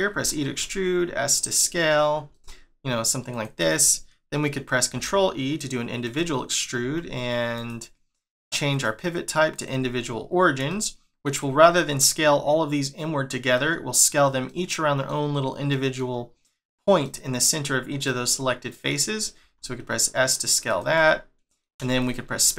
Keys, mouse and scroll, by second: 4.9 ctrl+e, 6.8 s, 8.7 click, 10.0 scroll up 2, 10.6 shift+middle click, 13.5 middle click, 14.4 middle click, 15.7 middle click, 17.0 middle click, 18.0 middle click, 19.4 s, 20.9 middle click, 21.7 space, 22.0 click, 22.4 middle click.